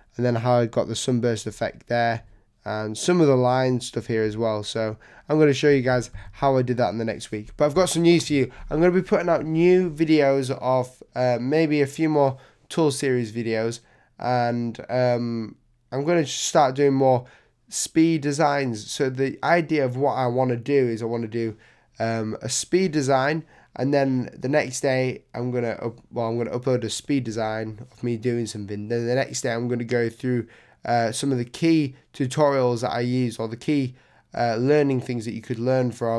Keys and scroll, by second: 6.1 super+0.